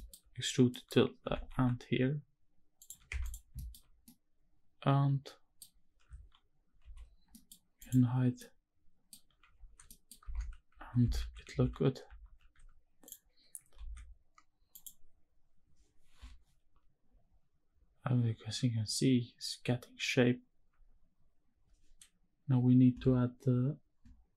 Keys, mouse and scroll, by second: 0.4 middle click, 0.9 g, 1.2 x, 2.5 ctrl+click, 2.8 Tab, 3.1 scroll down 1, 3.3 shift+middle click, 3.7-5.3 middle drag, 3.7 scroll down 1, 6.5 alt+h, 6.9 scroll down 2, 7.0 middle drag, 7.5 click, 8.1-8.8 middle drag, 9.3 ctrl+s, 9.5 middle drag, 10.1 shift+`, 13.5 ctrl+s, 14.5 click.